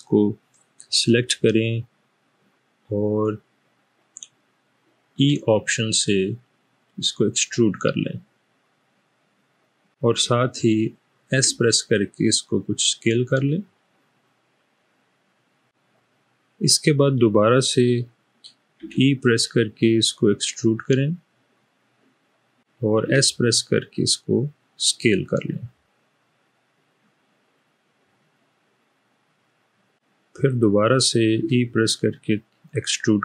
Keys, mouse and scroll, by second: 5.2 e, 11.3 s, 18.8 e, 23.2 s, 31.5 e.